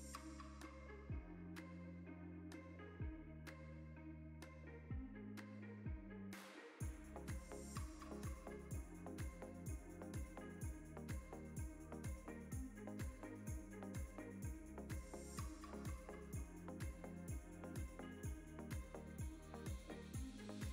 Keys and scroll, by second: 0.7-3.0 shift+z, 3.0 z, 3.9 Tab, 5.7 Tab, 13.3 Tab, 13.3 3, 16.7 i, 20.1 Tab.